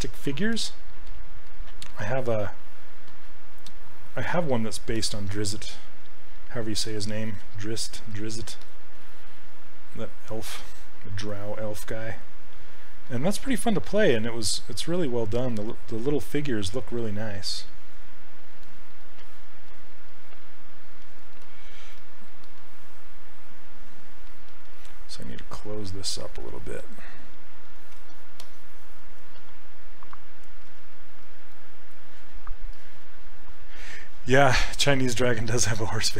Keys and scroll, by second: 6.1 s, 30.7 s.